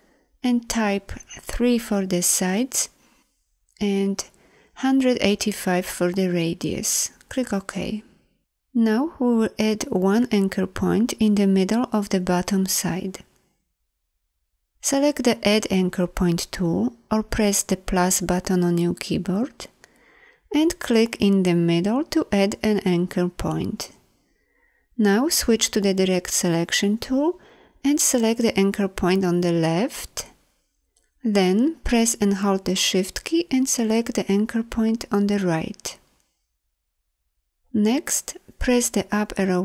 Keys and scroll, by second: 25.9 a, 38.9 Up.